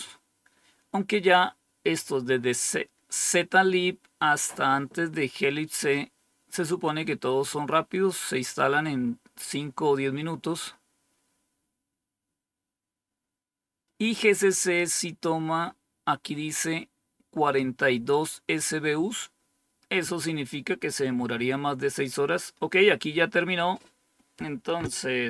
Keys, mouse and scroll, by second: 14.5 click, 18.0-20.4 drag.